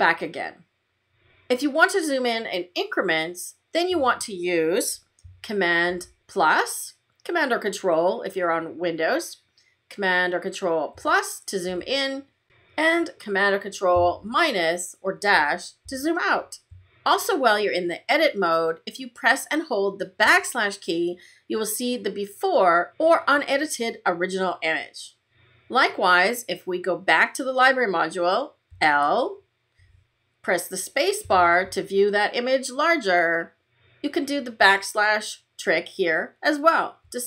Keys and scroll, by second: 5.8 super+=, 10.8 super+=, 11.9 super+=, 14.0 super+-, 20.1 \, 28.7 i, 31.1 space, 34.5 \.